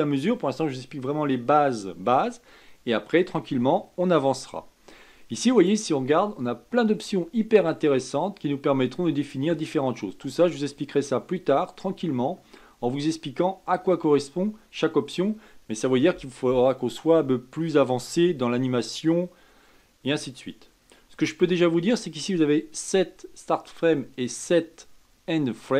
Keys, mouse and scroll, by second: 5.5-8.7 drag.